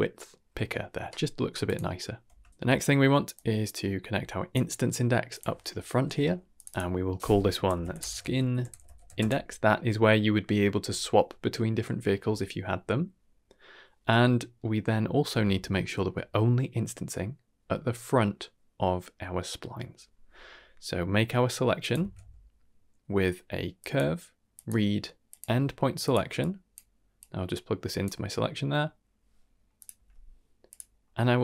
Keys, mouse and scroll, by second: 1.6 click, 2.2 Tab, 2.7 middle click, 3.3-4.5 drag, 5.2 click, 5.8 n, 6.5 click, 6.6-9.1 drag, 14.1-14.5 middle drag, 15.2 scroll down 2, 15.5 shift+middle drag, 16.0-16.4 middle drag, 21.3 middle click, 21.7 click, 21.9 shift+a, 26.3 click, 27.1-28.0 drag, 28.4-28.8 scroll up 2, 30.2-30.6 scroll up 1, 30.6 click, 30.9-31.4 scroll up 1.